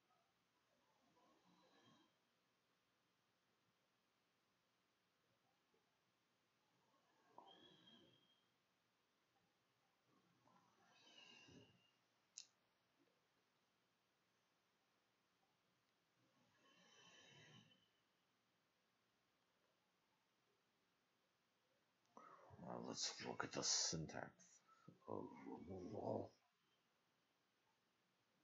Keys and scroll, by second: 0.6 Return, 1.4 shift+Return, 1.5-7.5 typing, 4.3 Delete, 4.6 Return.